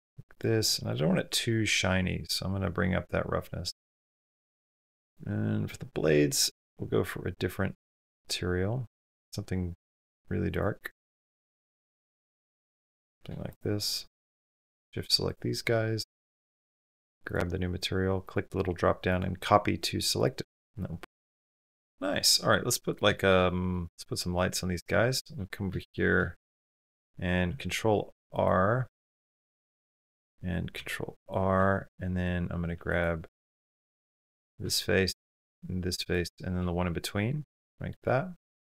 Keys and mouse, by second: 1.9-4.2 drag, 7.7 click, 13.4 click, 16.2 click, 18.1 click, 20.0 click, 21.3-22.2 shift+middle drag, 22.5 middle click, 24.7 Tab, 25.6-26.7 shift+middle drag, 27.3 ctrl+r, 30.6 ctrl+r, 32.6 3, 38.2 click.